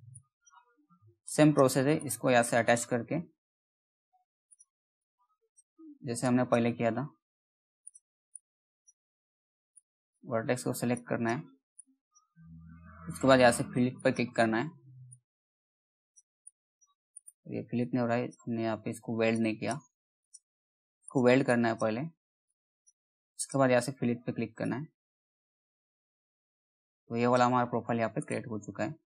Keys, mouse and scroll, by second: 2.8-4.0 scroll down 1, 4.0 click, 6.4-7.3 scroll up 1, 7.3 click, 7.4-16.6 drag, 16.6 right click, 17.3-27.7 drag, 27.7 right click.